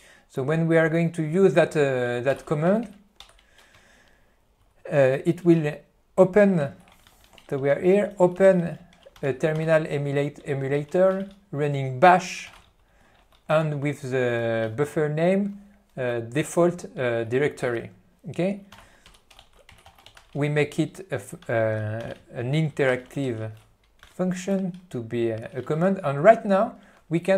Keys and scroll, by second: 2.7 n, 3.4 r, 3.8 p, 5.8 n, 7.2 alt+f, 8.2 q, 8.6 ctrl+n, 9.3 ctrl+g, 9.8 alt+f, 10.5 f, 11.0 q, 11.3 ctrl+f, 12.1 ctrl+g, 12.8 alt+f, 13.7 q, 18.6-20.1 typing, 21.6 Return, 22.5 n, 23.0 e, 23.4 q, 24.1 F2.